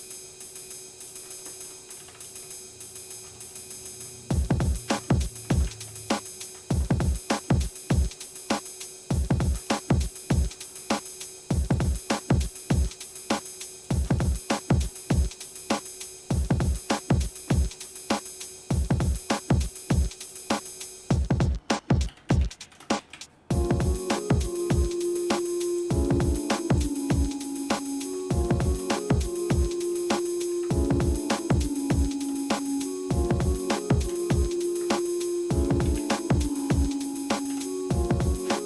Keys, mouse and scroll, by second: 1.0 alt+shift+click, 1.5 shift+middle click, 2.0 ctrl+z, 3.5 shift+middle click, 4.6 alt+shift+click, 5.5 ctrl+z, 5.9 alt+shift+click, 6.8 shift+middle click, 7.4 shift+middle click, 9.0 alt+shift+click, 9.8 shift+middle click, 11.6 alt+shift+click, 12.2 shift+middle click, 13.7 alt+shift+click, 14.3 shift+middle click, 14.9 middle click, 16.5 shift+middle click, 17.5 shift+middle click, 18.9 click, 20.4-25.8 drag, 26.8 click, 27.4-27.8 scroll down 1, 28.2 shift+middle click, 29.0 middle click, 29.7 shift+middle click, 30.5 Tab, 31.4 click, 31.9 shift+click, 33.8 ctrl+j, 34.8 Tab, 35.8 a, 37.3 alt+m.